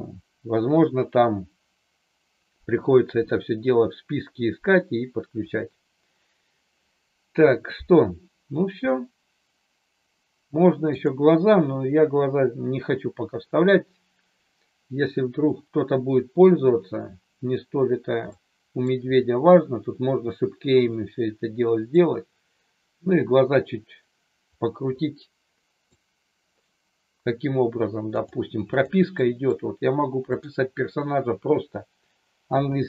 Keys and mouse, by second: 11.0-17.5 drag, 18.3 middle click, 21.9-25.9 middle drag, 28.3 click, 29.2 middle click, 30.3 click, 32.5 i.